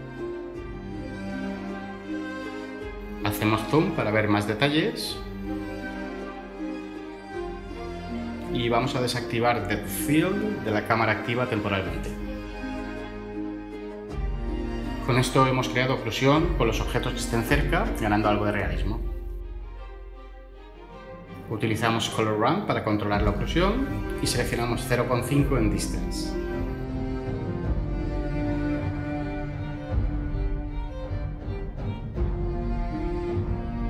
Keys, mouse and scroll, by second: 19.7 ctrl+z, 26.1 typing.